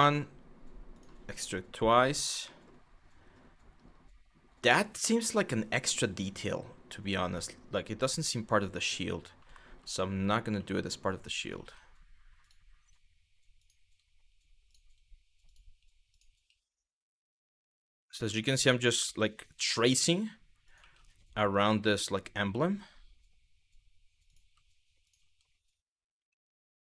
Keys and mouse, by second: 0.6 click, 2.2 middle click, 9.3 g, 9.8 click, 10.2 e, 11.0 click, 11.2 e, 12.0 click, 12.3 e, 13.2 click, 14.3 click, 14.4 e, 15.1 click, 15.7 click, 16.6 click, 17.6 click, 18.7 middle click, 20.3 click, 20.4 e, 21.1 click, 21.5 shift+middle click, 23.9 click, 24.7 click, 25.6 click.